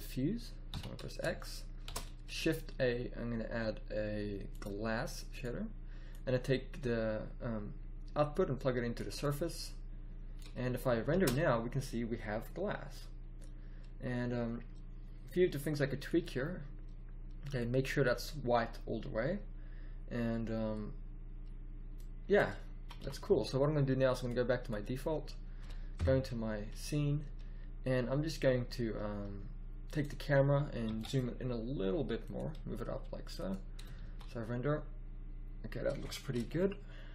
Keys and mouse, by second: 11.2 shift+z, 22.6 click, 22.8 z, 23.0 z, 25.9 KP_0, 30.8 g, 31.1-32.0 middle drag, 32.5 g, 34.0 shift+z.